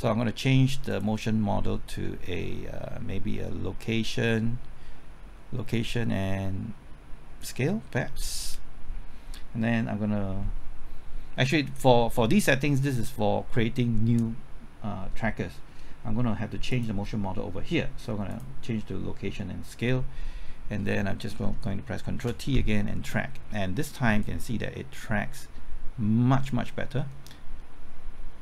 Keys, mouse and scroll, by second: 15.2-16.5 middle drag, 16.7 click, 22.0 typing, 22.2 ctrl+t, 24.2-28.4 drag.